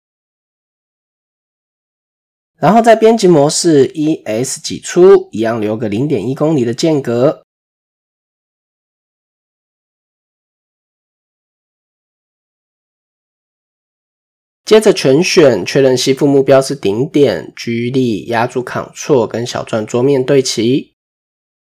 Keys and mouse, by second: 1.4 Tab, 4.1 shift+click, 4.7 s, 6.9 s, 8.5 shift+middle click, 8.9 s, 11.9 KP_4, 11.9 KP_1, 13.0 shift+middle click, 14.5 a, 15.0 shift+middle click, 17.8 g, 20.7 shift+click.